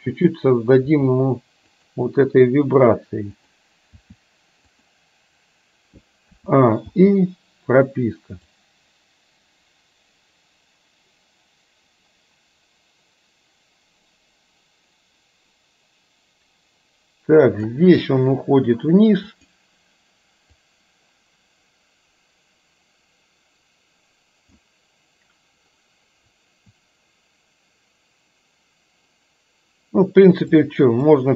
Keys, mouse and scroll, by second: 0.3 click, 1.0 r, 3.5 click, 4.0 r, 6.5 a, 7.0 i, 8.6-17.7 drag, 19.3 click, 20.6 click, 21.2-24.7 drag, 30.6 click, 31.1-31.3 drag.